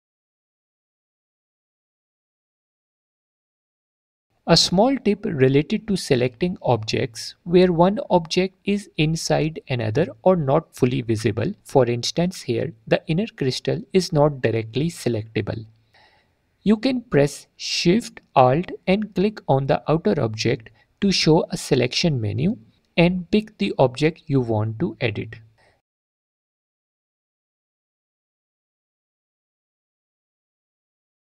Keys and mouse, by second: 0.5 click, 1.1 m, 2.2 m, 10.9 click, 11.6 click, 13.1 click, 13.4 click, 14.0 click, 14.3 click, 15.8 click, 16.5 click, 19.7 alt+shift+click, 23.6 shift+click, 25.9 shift+click, 28.4 shift+click, 29.5 click, 31.0 click.